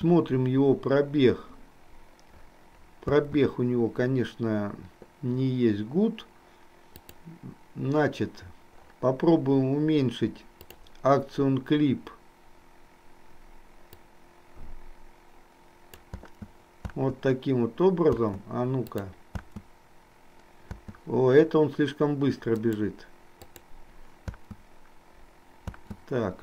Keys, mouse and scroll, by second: 3.3 space, 7.2 click, 10.7 click, 13.9-16.0 drag, 16.0 space, 18.9 click, 18.9 space, 22.7 click, 22.7 space, 23.5 click, 24.4 space.